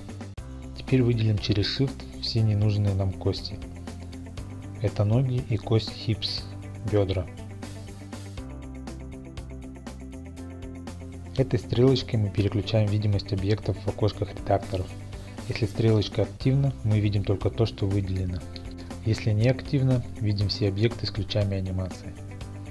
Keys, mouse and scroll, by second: 2.1-4.9 drag, 6.5 click, 7.1-7.9 scroll, 7.9 shift+click, 8.7 shift+click, 9.8 shift+click, 13.5 click, 14.6-19.3 drag, 19.5 click.